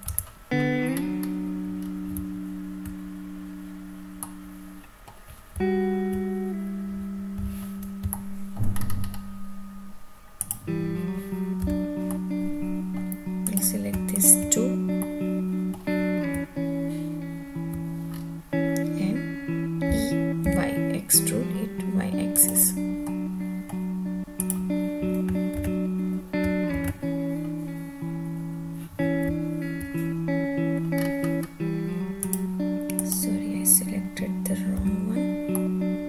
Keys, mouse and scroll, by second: 0.1 Tab, 0.9-1.6 scroll up 2, 1.8 scroll down 1, 2.1 `, 4.2-4.7 middle drag, 5.5 `, 8.1 shift+middle click, 8.7-9.5 scroll up 5, 10.3 click, 11.6 3, 12.1 middle click, 13.4 click, 14.1 shift+click, 15.0 middle click, 16.4 `, 18.0-18.9 scroll down 2, 19.9 e, 20.4 y, 22.3 click, 23.0 middle click, 24.3 click, 25.5 ctrl+z, 26.8 ctrl+z, 29.2 `, 31.1 scroll up 4, 32.2 click, 33.0 click, 34.8 3, 35.5 middle click.